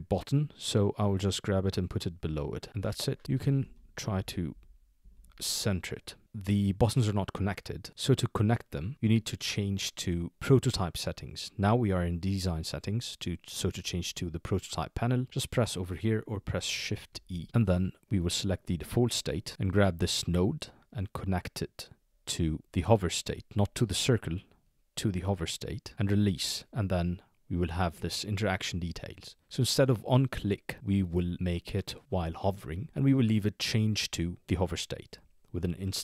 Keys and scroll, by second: 5.0 Down, 17.1 shift+e.